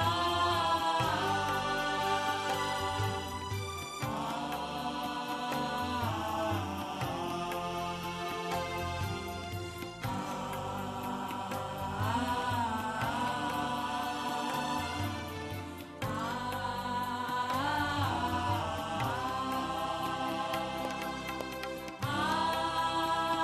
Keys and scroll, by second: 0.7 Left, 0.9 Left, 3.3 space, 4.1 ctrl+z, 5.6 space, 8.0 ctrl+alt+space, 10.1 shift+Up, 10.3 shift+Left, 10.7 Up, 10.9 Left, 11.0 Left, 11.1 Left, 11.2 Left, 11.4 Left, 11.9 shift+Down, 12.4 Right, 12.7 Right, 13.2 Right, 13.6 Right, 13.7 Right, 14.0 Up, 14.1 Up, 14.2 Up, 14.6 Up, 15.0 Left, 19.0 space, 20.4 ctrl+c, 20.7 b, 21.0 Right, 21.1 Right, 21.5 Right, 21.7 Right.